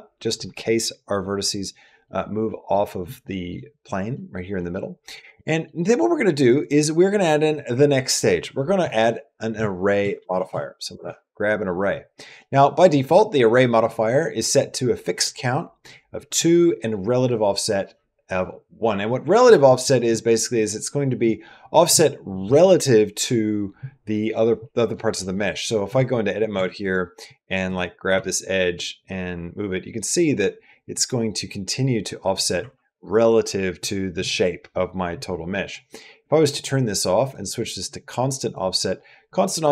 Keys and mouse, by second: 1.7 middle click, 2.3 middle click, 3.0 shift+middle click, 3.9 middle click, 4.4 middle click, 5.2 middle click, 5.6 middle click, 6.4 click, 8.7-10.8 drag, 10.2 r, 12.2 middle click, 19.7-21.1 drag, 21.7 click, 25.8 Tab, 26.4 Tab, 27.9 g, 36.3 click, 37.0 click, 38.3 click.